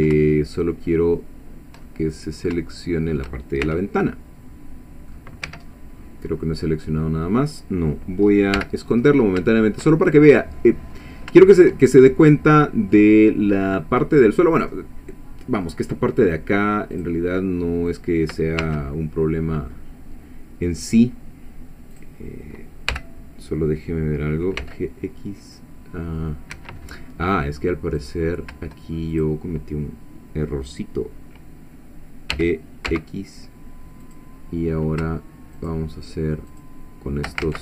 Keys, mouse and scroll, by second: 1.9 shift+middle click, 3.6 shift+c, 4.0-5.3 shift+middle drag, 5.5 Escape, 5.7-6.2 scroll down 1, 6.3-8.1 middle drag, 8.2 scroll up 2, 8.6 h, 9.1-9.4 scroll up 1, 9.5 shift+middle click, 10.2 shift+middle click, 10.9 scroll up 1, 11.6 shift+middle click, 12.2 middle click, 16.9 click, 17.9 click, 18.6 1, 21.9 click, 22.9 g, 24.6 x, 26.5 Escape, 28.0 click, 29.1 shift+click, 32.3 e, 32.9 x, 34.0 click, 35.6 shift+click, 36.5 shift+click, 37.4 ctrl+shift+z.